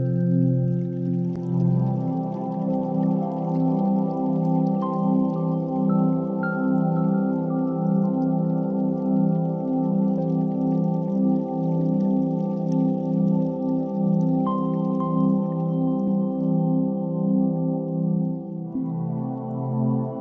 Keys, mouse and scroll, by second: 0.1 shift+a, 3.5 s, 5.1 click, 5.3 g, 5.4 z, 6.1 click, 7.9 click, 9.0-11.6 drag, 10.2 0, 10.3 0, 12.9 g, 13.2 z, 14.6 click, 15.1 r, 15.4 x, 16.8 1, 17.2 8, 17.3 0, 17.5 Return, 19.0 KP_3, 20.1 shift+d.